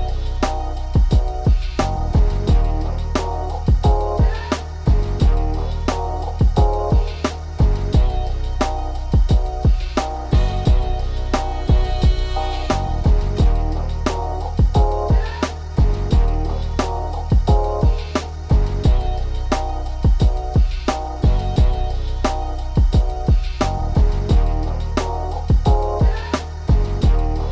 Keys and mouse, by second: 3.0 shift+right click, 4.1-5.3 shift+right drag, 6.6 f, 9.1 KP_6, 9.3 KP_6, 9.8 KP_6, 10.0 KP_6, 11.5 KP_4, 11.7 KP_4, 12.3 KP_4, 18.4 click, 19.8-20.8 right drag, 21.8 right click, 23.0 KP_6, 23.3 KP_4, 23.4 KP_8, 23.6 click, 23.7 right click, 24.2 right click, 25.0-27.5 typing, 25.2 click, 25.3 right click, 26.0 click, 27.0 KP_Add, 27.2 KP_Add.